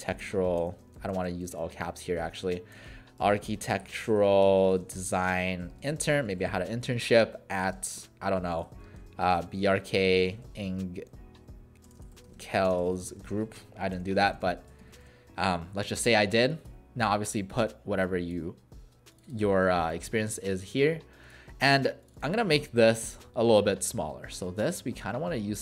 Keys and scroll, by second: 0.0-0.9 typing, 2.5-15.5 typing, 20.2 BackSpace, 22.5 ctrl+a.